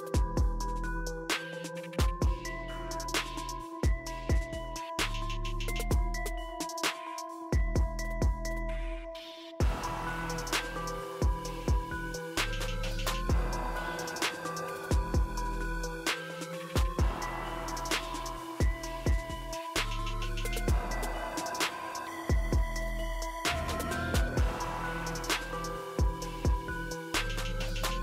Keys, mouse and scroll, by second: 16.7 click, 19.6 typing, 25.9 ctrl+Num_Lock.